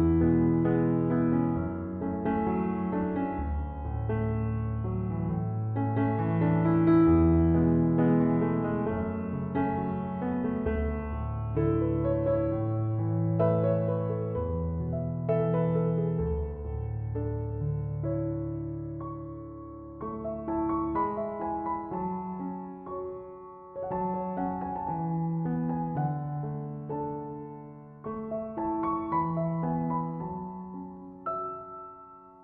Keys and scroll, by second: 3.5 typing.